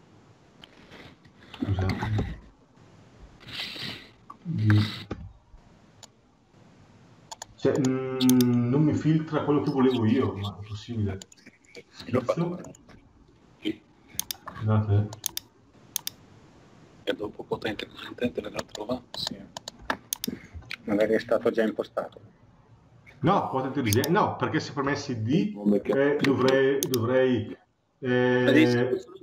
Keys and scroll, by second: 20.4 Escape.